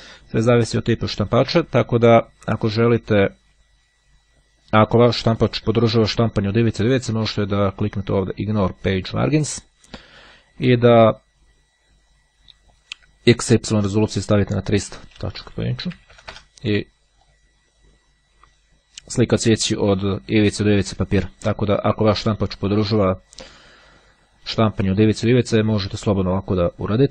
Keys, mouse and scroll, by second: 8.1-9.3 drag, 12.2-14.8 drag, 14.9 KP_3, 15.1 KP_0, 17.4 click.